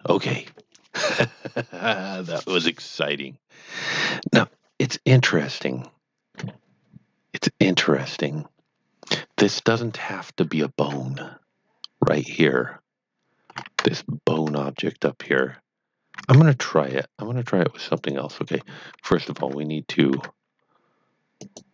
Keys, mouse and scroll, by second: 10.5 shift+middle click, 12.2 click, 13.6 scroll up 1, 14.0 shift+middle click, 15.2 click, 16.0 scroll down 1, 16.6 shift+middle click, 17.9 click, 21.4 click.